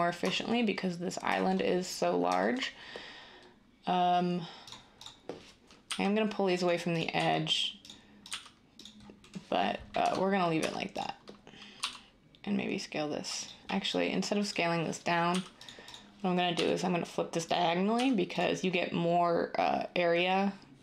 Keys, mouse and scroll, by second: 5.8 g, 7.1 g, 8.2 g, 10.0 Tab, 10.5 Tab, 11.7 s, 15.2 g, 16.5 r, 17.9 g.